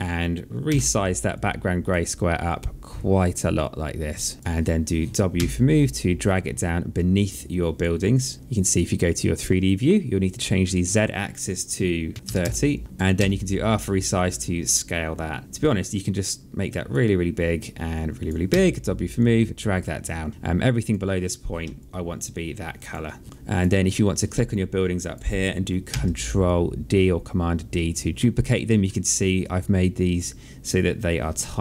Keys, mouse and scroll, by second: 0.4 r, 1.1 click, 2.7 click, 4.1 click, 5.1 w, 5.7 click, 8.2 click, 8.8 click, 10.5 click, 12.1 KP_Subtract, 12.2 KP_0, 12.9 r, 13.5 click, 15.8 click, 17.3 click, 18.3 w, 18.9 click, 21.5 alt+click, 23.2 alt+click, 24.2 alt+click, 25.7 ctrl+d, 26.2 click, 28.6 alt+middle click.